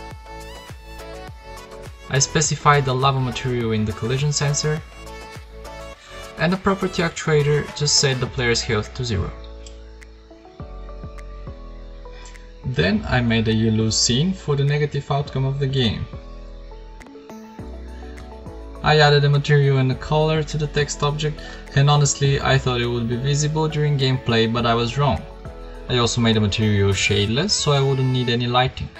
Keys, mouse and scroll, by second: 6.8 KP_0, 13.4 BackSpace, 13.5 BackSpace, 15.9 KP_7, 16.9 shift+a, 17.9 Tab, 18.1-19.0 typing, 19.5 Tab, 25.8 KP_5, 26.4 g, 27.7 ctrl+s, 27.9 ctrl+s.